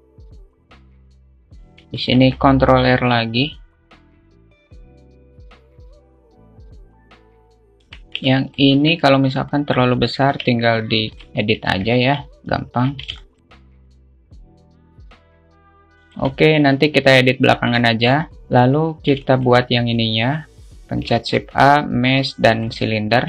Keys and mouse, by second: 0.8 alt+shift+middle click, 1.1 s, 2.3 ctrl+r, 3.8 ctrl+z, 3.8 click, 4.4 alt+z, 4.9 ctrl+z, 5.5 click, 5.7 g, 6.2 click, 6.4 s, 6.6 click, 6.8 alt+z, 7.0 Tab, 7.0 alt+middle click, 7.3 alt+click, 7.7 `, 7.7 shift+middle click, 8.1 Tab, 8.6 alt+shift+middle click, 9.2 alt+z, 9.8 click, 10.6 g, 11.2 alt+shift+middle click, 12.0 alt+z, 12.3 a, 13.3 alt+z, 13.4 alt+shift+middle click, 13.7 alt+z, 13.7 click, 13.9 alt+z, 14.1 click, 14.6 alt+shift+middle click, 15.7 Tab, 16.1-16.5 alt+shift+middle drag, 17.4 Tab, 18.2 shift+middle click, 19.6 alt+shift+middle click, 21.2 shift+a.